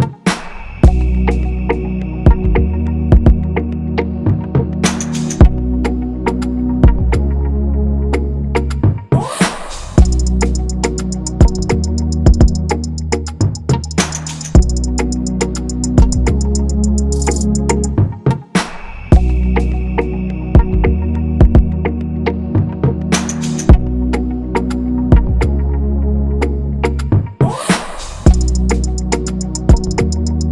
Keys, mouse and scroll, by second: 0.0 scroll, 2.3 shift+click, 4.2 m, 4.9 alt+click, 6.8 ctrl+-, 13.6 ctrl+=, 13.7 ctrl+=, 13.8 ctrl+=, 14.1 scroll, 15.3 typing, 18.9 typing, 22.3 BackSpace.